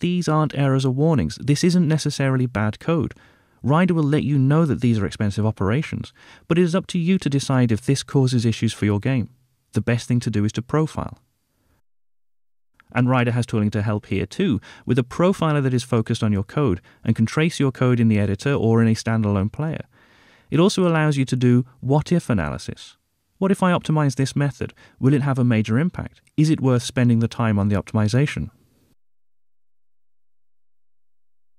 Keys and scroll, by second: 3.3 alt+Return.